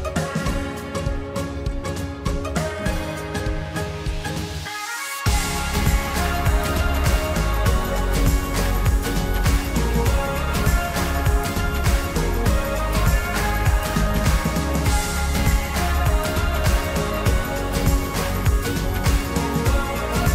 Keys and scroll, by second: 1.3 ctrl+t, 2.8 ctrl+t, 10.2 ctrl+t, 11.0 ctrl+t.